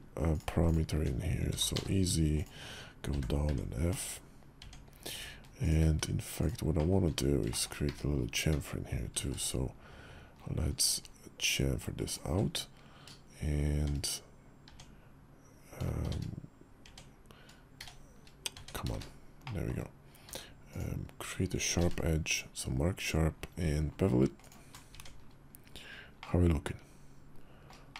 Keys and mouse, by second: 1.3 e, 2.9 f, 3.2 Tab, 3.7 /, 4.4 Tab, 5.4 alt+click, 6.1 alt+shift+click, 6.6 alt+shift+click, 7.3 shift+click, 8.9 ctrl+b, 13.6 shift+1, 14.4 Tab, 15.8 shift+1, 16.6 Tab, 17.5 shift+1, 18.3 Tab, 18.7 shift+`, 19.2 click, 20.0 q, 21.5 ctrl+b, 24.7 Tab, 25.9-27.4 drag, 27.7 shift+middle drag.